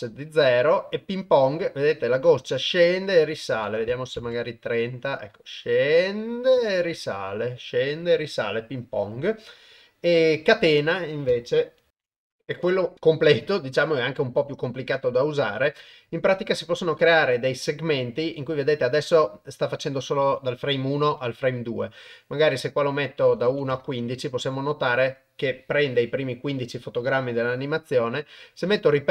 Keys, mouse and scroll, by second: 3.4 click, 8.9-11.7 drag, 22.5-23.7 drag, 28.5 click.